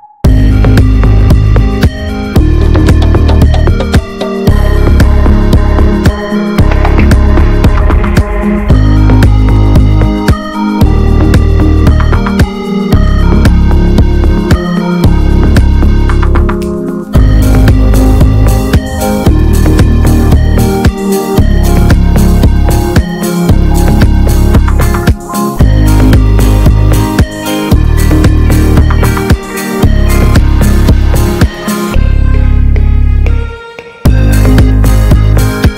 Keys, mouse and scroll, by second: 0.4 ctrl+r, 1.6 s, 3.1 1, 3.3 click, 4.6 s, 6.9 s, 8.1 ctrl+r, 8.6 s, 10.5 Left, 11.3 shift+Left, 11.7 shift+Left, 12.1 s, 13.2 s, 14.9 Tab, 15.1 scroll down 3, 15.2 alt+middle click, 15.4 click, 15.7 ctrl+a, 16.4 ctrl+s, 16.6 ctrl+s, 16.8 middle click, 17.0-17.3 scroll up 2, 17.3 middle click, 18.0 ctrl+s, 18.1 ctrl+s, 18.8 Tab, 19.0 middle click, 19.5-20.0 scroll up 1, 20.0 alt+middle click, 20.6 a, 21.2 alt+middle click, 21.4 alt+z, 21.6 scroll up 1, 21.8 click, 22.2 ctrl+s, 23.7 r, 25.1 click, 25.7-26.8 drag, 26.8 r, 27.9 scroll down 1, 28.0 middle click, 28.1 alt+z, 28.4 Tab, 28.6 middle click, 28.8 Tab, 29.0 alt+z, 29.3 click, 29.5 alt+middle click, 29.8 alt+z, 30.0 alt+middle click, 30.8 a, 31.1 middle click, 31.3 ctrl+s, 31.9 e, 33.9 Tab, 34.0 middle click, 34.2 Tab, 34.8 ctrl+r.